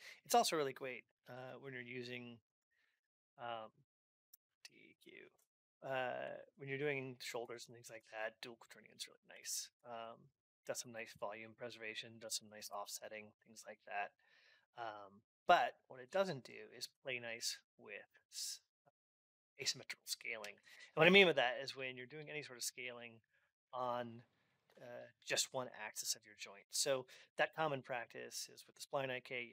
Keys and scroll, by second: 5.1 Return, 6.3 alt+x, 11.9 ctrl+Up.